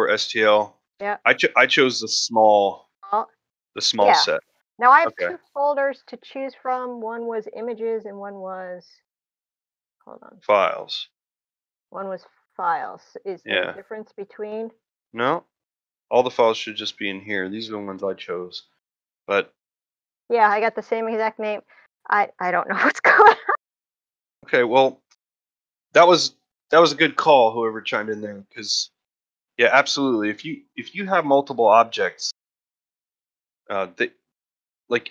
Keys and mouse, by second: 20.1 middle drag, 20.6 middle drag, 22.0-22.5 drag, 23.4 click, 32.4 middle click, 32.9 shift+middle drag, 34.5 middle drag, 34.8 shift+middle click.